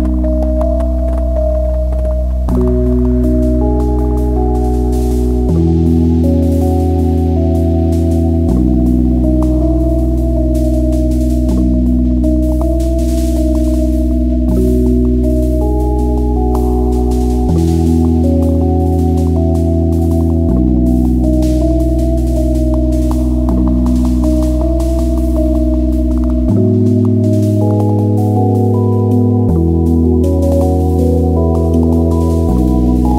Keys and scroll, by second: 3.2 ctrl+z, 12.1 ctrl+z, 16.9 `, 20.2 /, 21.5 alt+h, 23.3 /, 24.1 `.